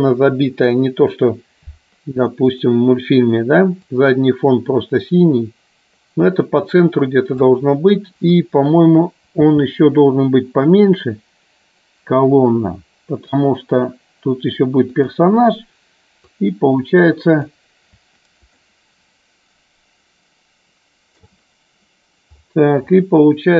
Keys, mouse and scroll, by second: 2.4 click, 4.1-7.6 drag, 15.2 click, 16.3-17.7 drag, 18.7-21.3 ctrl+middle drag.